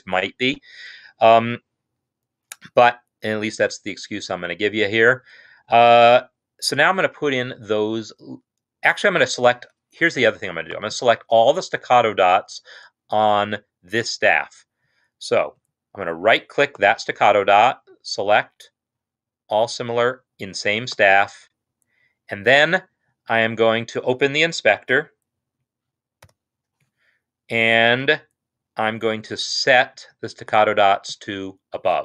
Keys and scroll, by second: 26.3 super+8.